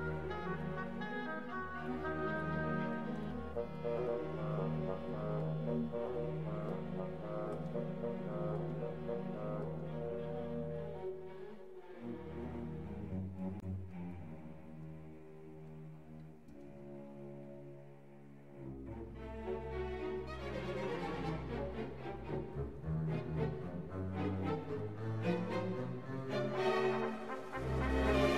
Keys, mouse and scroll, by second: 0.0-4.7 typing, 0.1 Tab, 0.3 Tab, 0.5 click, 0.8 Tab, 1.0 alt+h, 1.1 click, 1.1 ctrl+Down, 1.3 ctrl+s, 1.3 click, 1.8 Tab, 1.8 click, 2.2 Tab, 4.2 right click, 6.1-9.9 typing, 6.2 right drag, 7.0 right drag, 7.4 right drag, 7.9 alt+h, 9.8 alt+h, 10.3 ctrl+s, 10.5 ctrl+s, 11.7 shift+b, 12.1 click, 13.8-21.1 typing, 13.9 click, 14.3 Tab, 15.6 ctrl+Tab, 16.4 alt+h, 17.1 Tab, 17.4 Tab, 17.9 click, 18.0 Tab, 18.1 click, 18.2 right click, 19.4 right click, 19.9 right click, 20.6 alt+h, 21.0 right click, 21.8 ctrl+s, 22.0 ctrl+s, 22.5 ctrl+s, 23.5 click, 23.7 middle click, 24.7 click.